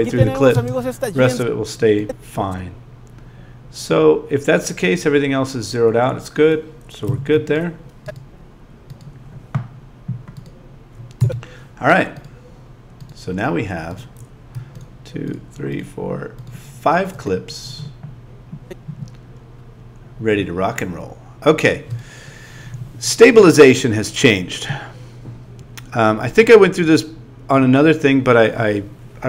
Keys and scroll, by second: 0.5 space, 7.0 z.